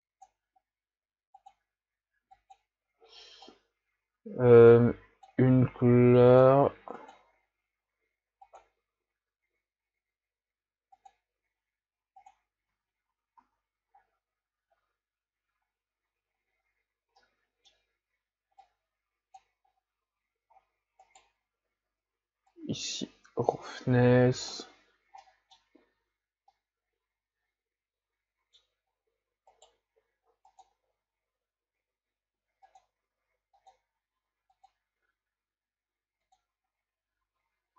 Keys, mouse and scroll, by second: 13.6 a, 14.2 scroll down 6, 16.4-16.8 ctrl+scroll up 2, 18.7-19.7 drag, 19.7-20.6 scroll up 5, 20.6-21.0 scroll down 4, 21.0 right click, 22.6-25.9 drag, 25.9 a, 26.6-28.5 middle drag, 28.9-29.5 scroll up 1, 29.2 middle click, 29.5-32.2 right drag, 32.9 click.